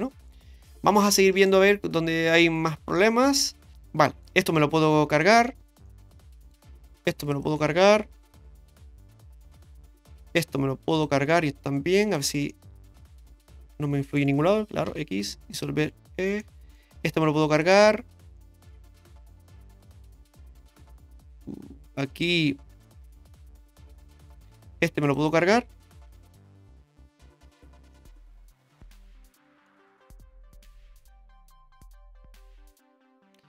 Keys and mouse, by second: 1.1 shift+middle click, 2.4 middle click, 3.7 middle click, 5.2 alt+shift+right click, 5.9 middle click, 7.3 alt+shift+right click, 8.1 x, 9.1 middle click, 10.9 alt+shift+right click, 12.0 alt+shift+right click, 12.5-14.2 middle drag, 14.9 x, 16.4 middle click, 17.6 alt+shift+right click, 18.4 middle click, 19.4 x, 20.1-22.2 middle drag, 22.9-24.3 middle drag, 25.0 alt+shift+click, 26.1 x, 27.9-29.6 middle drag, 30.2-33.4 middle drag.